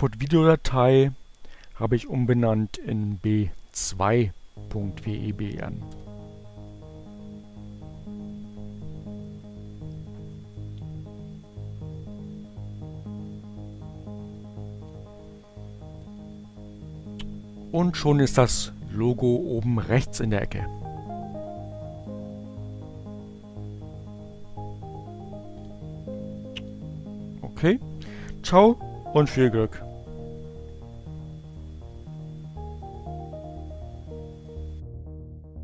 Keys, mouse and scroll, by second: 11.1 click, 12.0 click, 14.5 click, 21.9 click, 23.4 click, 30.3 click, 34.2 click.